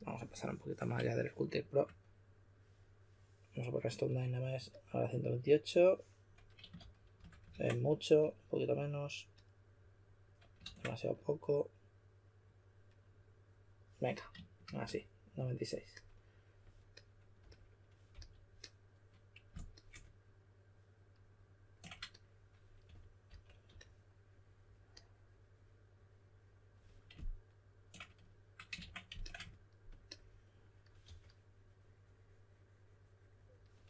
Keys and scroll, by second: 6.7-7.1 typing, 7.5 super+z, 10.6 super+z, 18.1 s, 22.6-24.1 typing, 28.7 super+z, 31.0 typing.